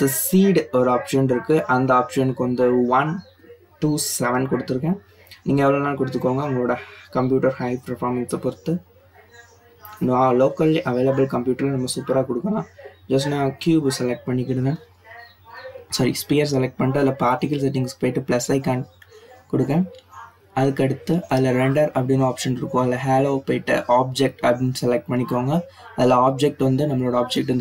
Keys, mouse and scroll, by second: 0.0-1.1 drag, 1.1 BackSpace, 4.5-5.7 drag, 5.7 BackSpace, 5.8 BackSpace, 12.2 click, 13.6 click, 15.6-16.3 drag, 17.6-19.2 scroll down 8, 19.8-20.3 drag, 20.3 scroll down 4, 21.5 click, 25.3-27.6 drag.